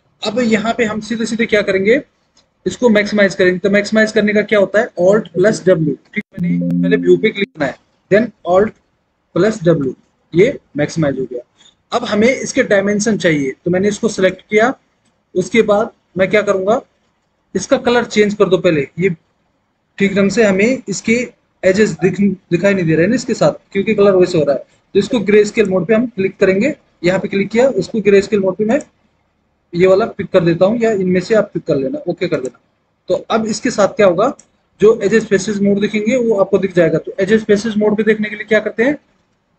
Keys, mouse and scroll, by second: 6.0 alt+w, 9.9 alt+w.